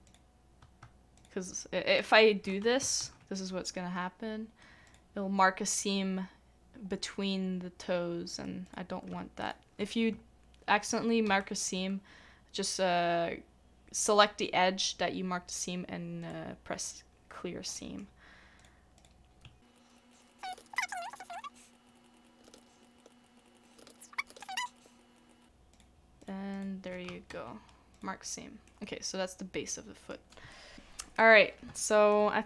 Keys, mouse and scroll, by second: 0.0 shift+click, 1.2 shift+click, 2.0 shift+click, 3.0 ctrl+e, 9.1 ctrl+e, 9.4 shift+click, 11.3 ctrl+e, 17.7 ctrl+e, 19.7 shift+click, 19.9 shift+click, 20.5 ctrl+e, 21.5 shift+click, 22.4 shift+click, 22.5 ctrl+e, 23.1 shift+click, 23.8 ctrl+e, 24.1 right click, 24.3 ctrl+e, 24.9 shift+click, 27.7 ctrl+e, 28.7 middle click, 30.3 scroll down 1, 30.5 shift+middle click, 31.7 shift+middle click, 31.8 shift+middle click, 32.3-32.4 shift+scroll up 1.